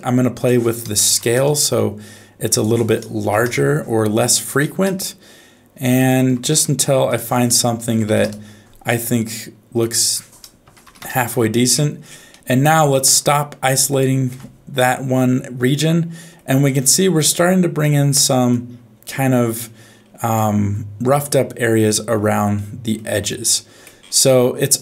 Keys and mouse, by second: 0.4 click, 2.6 click, 4.4-6.5 drag, 7.1-8.2 drag, 9.9-11.0 drag, 12.4 middle click, 13.9 ctrl+shift+click, 15.8 middle click, 17.9 middle click, 20.4 middle click, 22.5 middle click, 23.3 middle click.